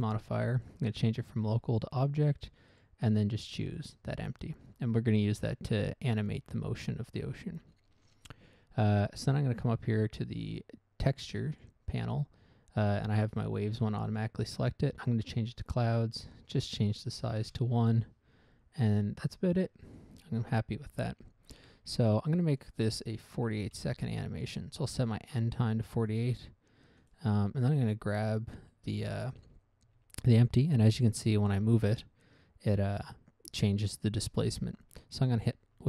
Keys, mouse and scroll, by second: 1.3 click, 2.2 click, 2.8 click, 3.1 click, 4.1 click, 11.9 click, 14.5 click, 15.4 click, 16.8 click, 17.8 1, 17.9 Return, 20.2 click, 23.0 click, 23.9 typing, 24.1 Return, 26.5 click, 27.4 right click, 28.6 right click, 30.2 g, 34.7 right click.